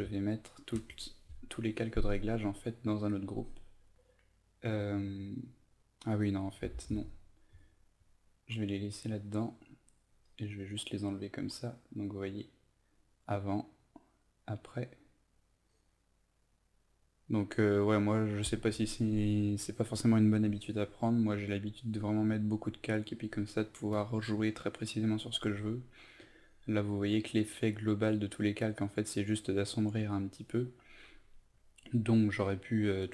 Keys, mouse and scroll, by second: 0.7 ctrl+g, 6.8 ctrl+alt+z, 8.8-33.1 drag.